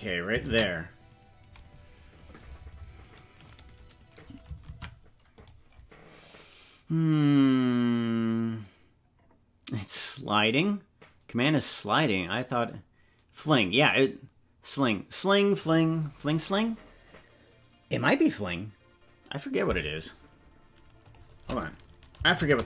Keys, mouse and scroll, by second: 2.8 ctrl+s, 3.5 right click, 4.7 ctrl+Tab, 5.4-8.4 right drag.